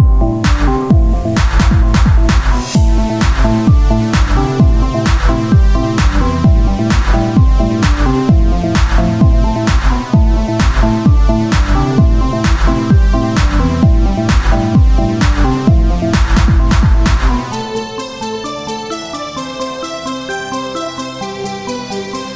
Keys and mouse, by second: 0.2 ctrl+z, 5.2-6.2 drag, 6.2 e, 11.2 e, 17.4 s, 19.5-21.6 drag, 21.6 e.